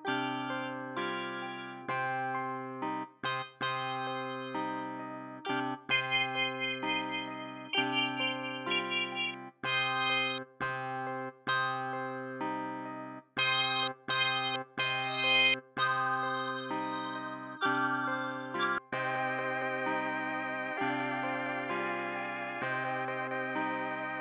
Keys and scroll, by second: 2.7 r, 3.0 space, 3.2 space, 3.4 space, 5.7 space, 10.5 space, 11.2 space, 11.4 space, 13.1-15.7 typing.